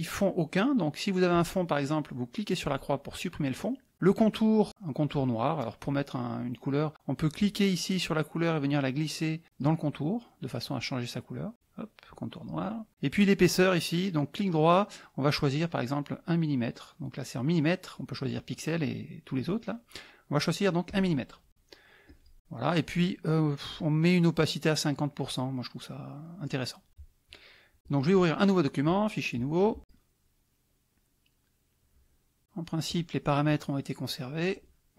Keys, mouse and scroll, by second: 1.3 click, 2.6 click, 7.3-12.7 drag, 14.4 middle click, 20.9 click, 22.0 click, 27.8 click, 28.9 click, 32.8 click.